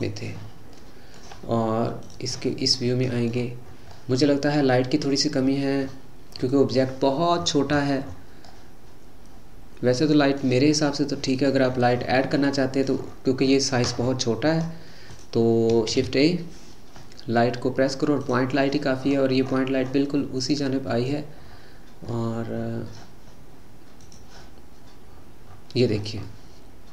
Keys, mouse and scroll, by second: 0.0 click, 0.8-2.4 middle drag, 2.4 click, 2.7-3.4 middle drag, 3.4-3.9 scroll down 6, 3.9-5.4 middle drag, 5.4-7.4 scroll down 10, 7.4-8.5 scroll up 20, 8.5-11.7 middle drag, 11.7-12.3 scroll down 8, 12.3-13.1 middle drag, 13.1-14.1 scroll down 8, 14.1 scroll down 5, 14.6-15.1 scroll up 4, 15.1 click, 15.9 shift+a, 19.0-20.6 scroll up 15, 20.6 middle click, 21.5-22.1 scroll down 4, 22.1-24.5 scroll down 7, 24.5 click, 25.1-26.2 scroll up 10, 26.2-26.9 middle drag.